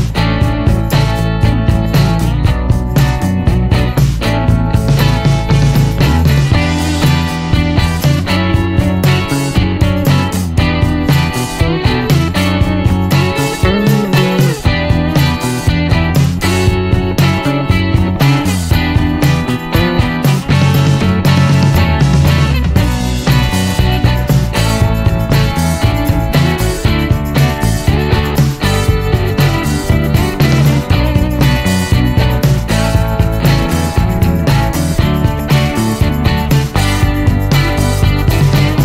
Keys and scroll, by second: 3.4-4.0 typing, 10.2 Up, 12.5 Up, 15.0 Return, 22.1-23.6 typing.